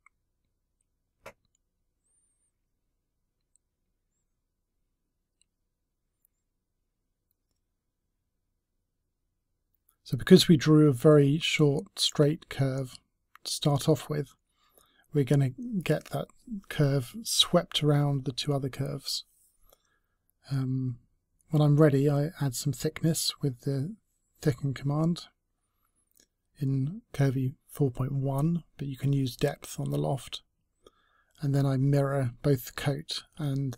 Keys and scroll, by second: 29.2 space.